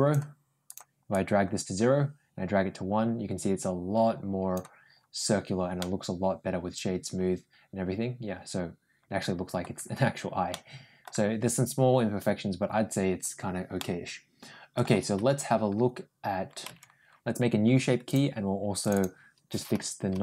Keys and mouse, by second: 0.9-4.4 drag, 5.6-9.4 middle drag, 10.4 middle click, 13.6-14.6 middle drag, 15.0 Tab, 16.5 Tab, 18.6 click, 18.7-20.2 drag.